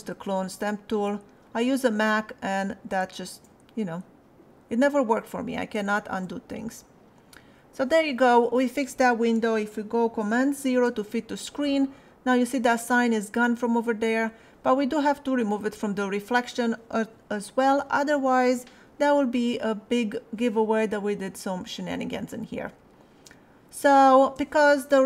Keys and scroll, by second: 10.7 super+0, 22.6 space.